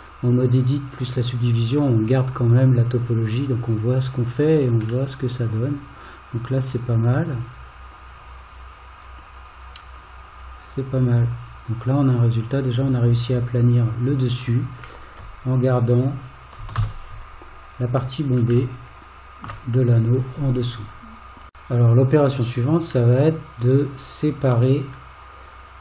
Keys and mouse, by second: 5.1-14.9 middle drag, 16.8 alt+z, 18.8 shift+middle click, 23.2 middle click.